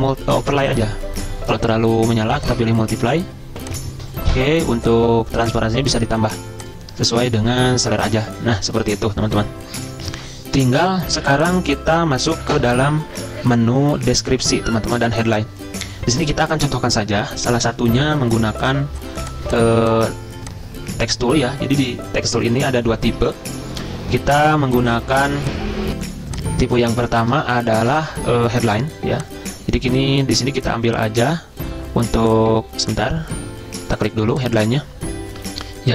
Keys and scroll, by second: 11.1 z, 23.7 super+m, 25.9 F10, 26.0 F10, 27.3 ctrl+c, 27.6 alt+Tab, 32.9 ctrl+z.